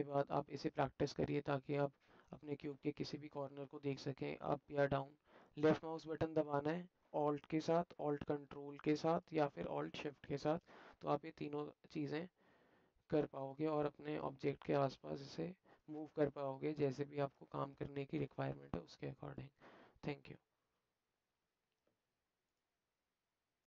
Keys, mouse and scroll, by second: 0.4-7.6 alt+drag, 7.9-9.2 ctrl+alt+middle drag, 9.5-10.6 alt+shift+middle drag, 11.1-13.3 alt+middle drag, 13.3 alt+click, 13.8 shift+middle click, 13.9 alt+shift+click, 14.9 drag, 15.0-15.8 alt+middle drag, 16.4-16.9 alt+shift+middle drag, 17.5-18.3 alt+shift+middle drag, 18.8-19.4 alt+middle drag.